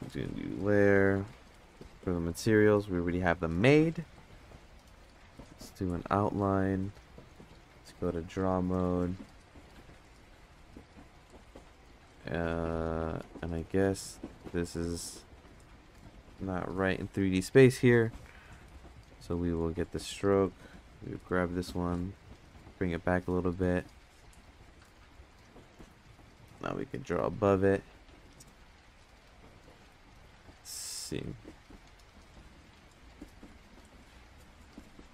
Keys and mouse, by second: 1.6-5.6 drag, 7.4-7.9 drag, 10.0 click, 13.3 right click, 13.8 ctrl+z, 15.9-16.4 drag, 18.9 click, 21.1 g, 24.6-25.4 drag, 25.8 click, 27.0 ctrl+z, 29.0 ctrl+space, 30.6 click, 31.8 click.